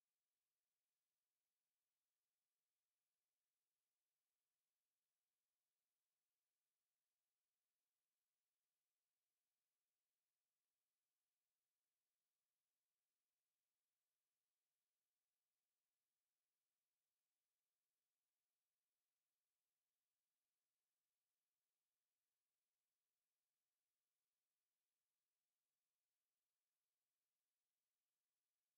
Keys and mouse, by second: 0.4 alt+middle click, 1.1 alt+middle click, 5.4 alt+click, 7.2 alt+middle click, 7.7 alt+right click, 11.9 right click, 14.5 shift+click, 14.9 shift+click, 15.3 shift+click, 16.0 shift+click, 16.5 alt+click, 17.1 alt+middle click, 18.5 shift+click, 19.0 shift+click, 19.4 shift+click, 20.0 shift+click, 20.4 shift+click, 20.9 alt+click, 21.7 shift+right click, 26.6 shift+right click, 27.7 alt+click, 28.3 alt+middle click.